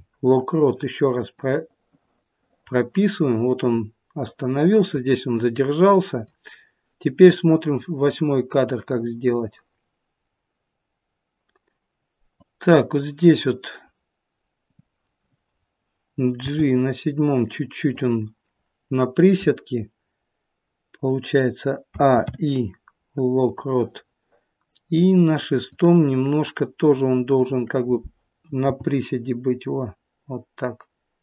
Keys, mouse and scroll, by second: 1.4 click, 12.5 click, 14.7 click, 16.3 g, 21.8 a, 22.1 i, 24.9 click, 27.3 click, 28.5 g.